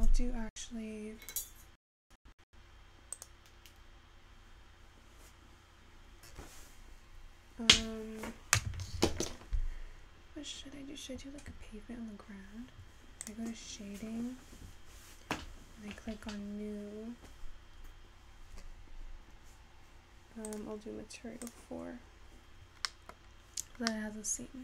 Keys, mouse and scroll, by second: 7.0 click.